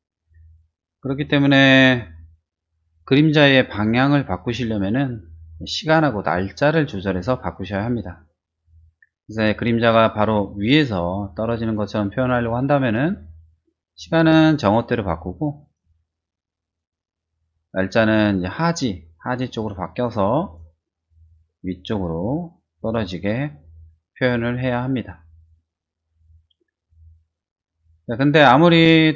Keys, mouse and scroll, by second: 14.1-15.6 drag, 16.8-20.5 drag, 21.3-22.9 drag, 23.5 middle click, 24.6 scroll up 1, 26.8-29.1 drag.